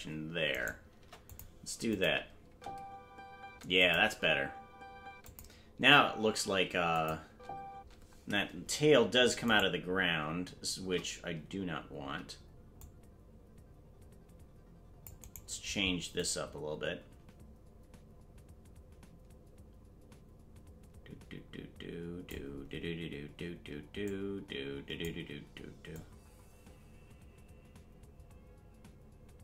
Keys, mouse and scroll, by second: 0.5 right click, 0.9 Delete, 1.9 click, 2.4 space, 3.8 click, 3.8 space, 4.0 space, 5.3 click, 5.3-7.7 typing, 6.9 click, 9.7 right click, 12.0 c, 16.2-22.3 drag, 24.0-25.0 drag, 25.9-29.4 drag.